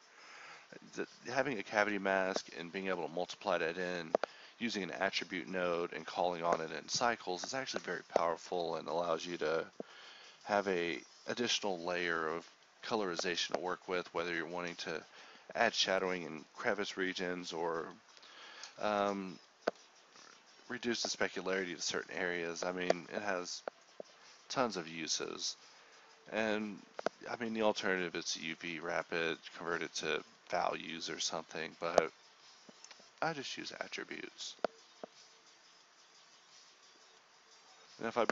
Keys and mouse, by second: 8.6 ctrl+x, 10.6 g, 11.2 shift+a, 20.2 shift+a, 21.6 x, 21.7 shift+a, 23.2-25.2 drag, 25.2 z, 25.9 ctrl+s, 26.1 a, 26.7 click, 27.5 ctrl+s, 29.4-30.0 drag, 30.2 ctrl+z, 32.4 a, 33.3 a.